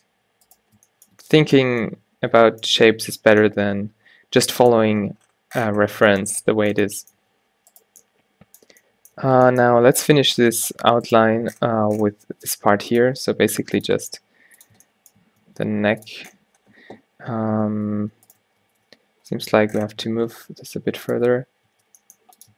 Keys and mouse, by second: 0.6-1.2 drag, 1.4 drag, 6.2 middle click, 7.3 a, 9.3 Tab, 12.4 e, 13.1 e, 14.0 e, 15.5 e, 18.1 Tab, 18.8 Tab, 19.3 g, 21.4 Tab, 21.8 Tab, 22.0 g.